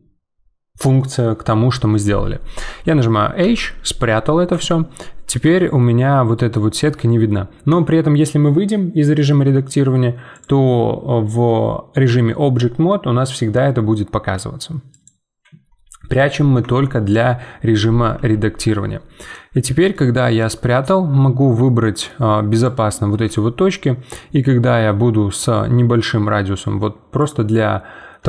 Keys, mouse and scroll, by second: 4.6-7.7 middle drag, 7.7 Tab, 10.3-13.3 drag, 14.9-16.6 drag, 16.6 Tab, 18.1 z, 18.7 middle click, 19.5 z, 19.9 middle click, 20.4 1, 21.2-22.5 middle drag, 22.5 click, 23.1 g, 27.4-28.2 middle drag.